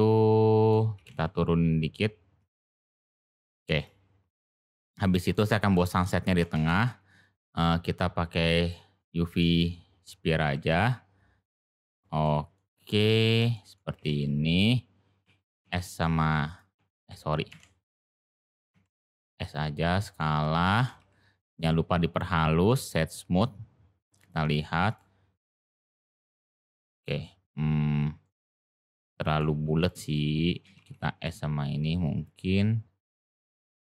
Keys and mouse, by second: 0.9 g, 3.7 click, 5.2 click, 6.5 shift+a, 8.9-9.4 middle drag, 10.4 g, 12.2 middle click, 13.0 middle drag, 13.5 shift+middle drag, 13.9 g, 15.2 s, 18.4 ctrl+z, 19.0 s, 20.1 middle click, 20.7 g, 24.1 click, 24.8 click, 25.7 g, 28.2-28.6 middle drag, 29.0 shift+middle click, 29.7 click, 32.9 click, 33.6 click.